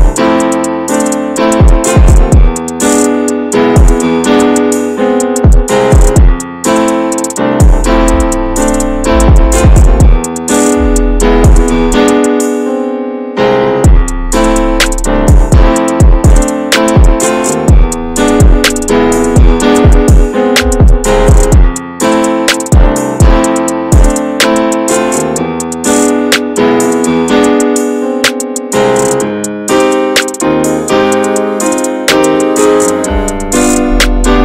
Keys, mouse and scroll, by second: 3.2-4.1 scroll down 5, 3.4 Tab, 4.1 middle click, 4.3 click, 4.5 scroll down 3, 4.6-5.2 shift+middle drag, 5.2-5.6 scroll up 2, 5.6 ctrl+s, 5.7 click, 5.9 Tab, 6.0 scroll up 2, 6.2 shift+middle click, 7.3 click, 7.7 Tab, 7.9 click, 8.2-8.8 right drag, 8.8 shift+middle click, 8.9-9.6 scroll up 3, 9.0 Tab, 9.2 middle click, 9.6 shift+middle click, 10.0 middle click, 10.8 alt+z, 11.0 scroll up 1, 11.3 shift+middle click, 11.8 click, 12.6 middle click, 12.8 alt+z, 13.4 x, 14.5 middle click, 14.7 Tab, 15.0-15.9 scroll down 9, 15.1-15.5 middle drag, 15.9-16.4 shift+middle drag, 16.4 ctrl+s, 16.6 shift+middle click, 16.8-18.0 scroll up 4, 16.9 Tab, 17.1 middle click, 17.4 shift+middle click, 18.0-19.0 middle drag, 19.0 scroll up 1, 19.2 Tab, 19.7 Tab, 19.9 click, 20.6 l, 21.1 middle click, 21.3 alt+z, 21.7-22.2 scroll down 1, 22.2 click, 22.6 alt+z, 23.0 click, 24.0 ctrl+z, 24.7 alt+z, 24.8 click, 25.2 shift+middle click, 25.3-25.6 shift+scroll up 2, 25.6 click, 25.9 click, 26.9 click, 27.7 ctrl+z, 28.2 middle click, 28.8 click, 29.7 shift+middle click, 30.5 ctrl+s, 30.9-31.9 drag, 31.9 e, 33.2 click, 33.6 alt+shift+click, 33.8 alt+shift+click, 34.2 middle click.